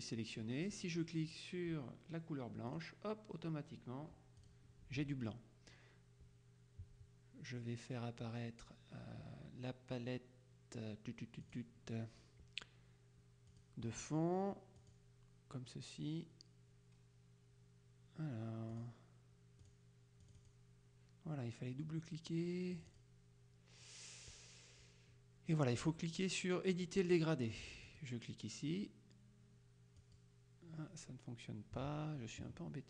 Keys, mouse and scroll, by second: 2.8 click, 4.5 click, 11.5 click, 13.6 click, 14.9 click, 18.8 click, 19.8 click, 22.8 click, 28.0 click, 30.1 click.